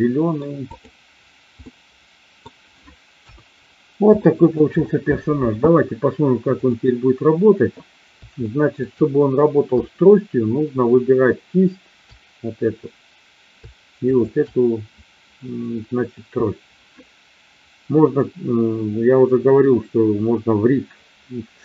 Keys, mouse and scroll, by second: 0.5 click, 1.5-2.4 middle drag, 3.1 KP_1, 4.3 shift+middle drag, 8.5 shift+middle click, 14.0 shift+click.